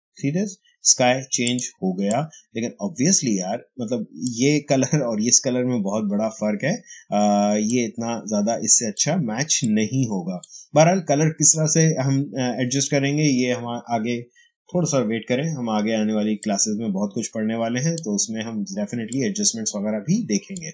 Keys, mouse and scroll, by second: 1.3-6.5 drag, 2.3 h, 7.6-12.8 drag, 16.3 click, 16.3-20.7 drag.